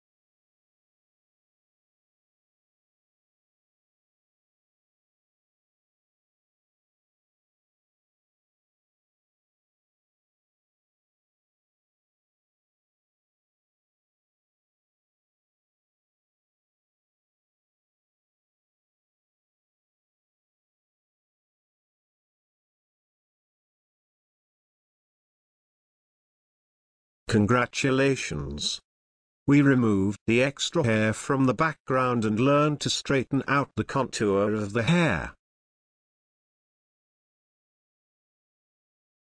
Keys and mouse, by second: 8.1 alt+right click, 9.2 alt+right click, 11.3 alt+right click, 14.7 alt+right click, 20.0 ctrl+space, 20.2 ctrl+click, 20.5 ctrl+space, 21.7 alt+right click, 25.1 space, 25.1 alt+click, 25.2 alt+double click, 25.4 alt+click, 25.5 alt+click, 28.3 ctrl+space, 28.6 ctrl+click, 33.7 space, 34.7 ctrl+click, 36.8 space, 37.9 shift+click, 38.6 ctrl+g.